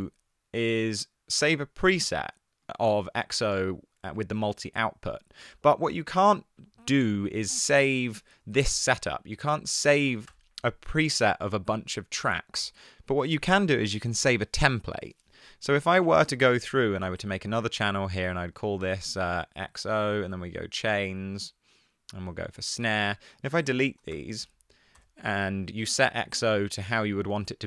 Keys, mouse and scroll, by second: 8.0 super+z, 10.3 BackSpace, 17.1 super+t, 24.3 BackSpace, 25.0 BackSpace.